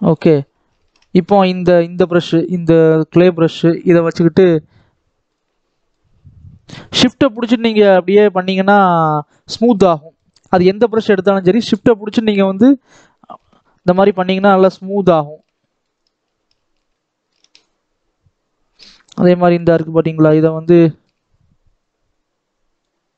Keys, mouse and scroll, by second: 0.2-1.9 scroll up 1, 1.9-9.8 drag, 9.8 middle click, 10.3-11.9 shift+drag, 11.9 middle click, 12.6 shift+click, 13.5 shift+middle click, 14.2-15.5 shift+drag, 15.5 shift+middle click, 15.9 shift+click, 16.8 middle click, 17.6-20.7 shift+drag, 20.7 shift+middle click, 21.1-21.7 scroll up 1, 21.7-23.1 drag.